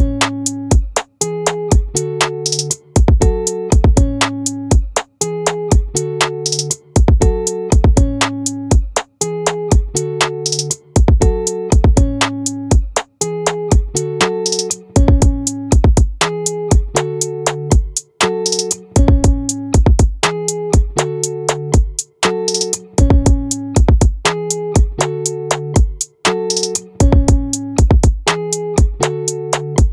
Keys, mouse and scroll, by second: 0.3 right click, 0.5 middle click, 0.7-1.9 drag, 11.3 click, 11.5-16.0 right drag, 16.0 click, 16.6 ctrl+z, 17.6-20.7 right drag, 25.8 right click, 26.2-29.9 drag.